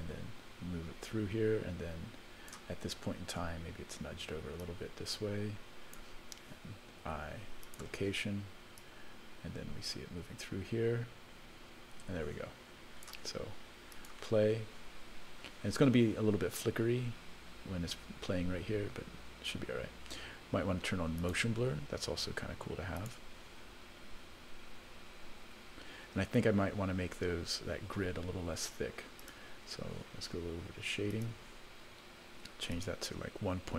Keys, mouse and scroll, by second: 4.6-6.0 drag, 7.0 i, 8.8-13.1 drag, 13.9 click, 17.6-18.2 scroll up 1, 21.2 click, 23.0 click, 29.2 click, 31.1 click, 32.7-33.7 drag.